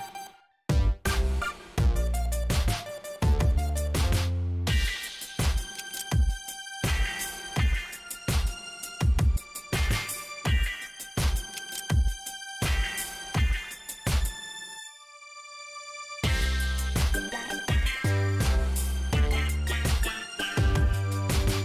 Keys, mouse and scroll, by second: 0.4 click, 1.2 ctrl+click, 2.2 ctrl+click, 3.0 ctrl+click, 5.7 ctrl+click, 6.5 ctrl+click, 8.0 ctrl+click, 9.0 ctrl+click, 10.2 ctrl+click, 11.5 ctrl+click, 13.3 ctrl+click, 14.7 ctrl+click, 16.4 click, 20.2 click, 21.1 click.